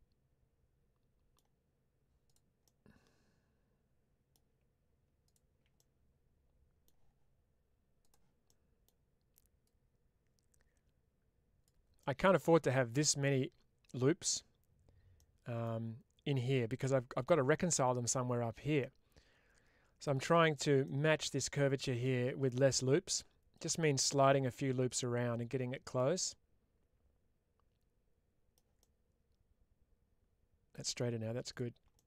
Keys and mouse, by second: 2.1 click, 2.5-4.2 middle drag, 5.6-6.7 middle drag, 7.9 click, 8.3 middle click, 9.5-11.5 drag, 11.9 middle click, 15.0 middle click, 16.7 middle click, 18.7-19.9 middle drag, 20.7 middle click, 21.9 middle click, 23.4-25.8 drag, 26.1-28.4 middle drag, 28.7-30.6 middle drag, 31.5 alt+click, 31.8 middle click.